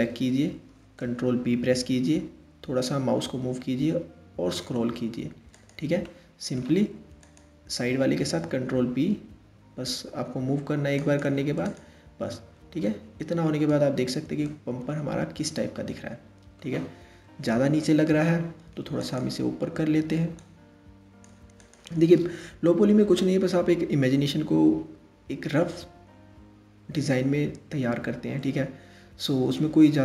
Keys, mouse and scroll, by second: 1.1 ctrl+b, 5.6-6.8 middle drag, 6.8 click, 7.8 ctrl+b, 11.3 click, 12.0 Tab, 12.4-13.6 middle drag, 13.6-14.1 scroll down 1, 14.1-17.0 middle drag, 17.0 KP_3, 18.6 click, 20.0 click, 21.2 click, 22.1-22.8 scroll down 2, 22.8-25.8 middle drag, 29.4-30.0 scroll up 3.